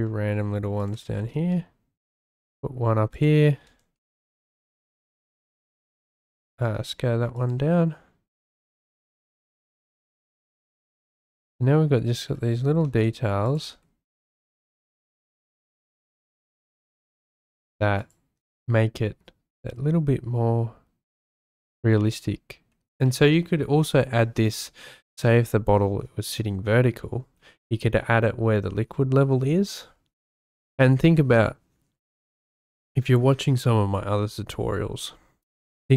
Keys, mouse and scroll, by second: 1.2 shift+d, 3.1 shift+click, 4.0 shift+d, 5.0 click, 5.2 s, 6.3 shift+click, 6.7 s, 7.4 click, 7.5 g, 8.3 shift+click, 12.9 shift+d, 13.6 s, 14.1 click, 14.3 g, 15.6 shift+d, 16.1 click, 16.3 s, 17.0 g.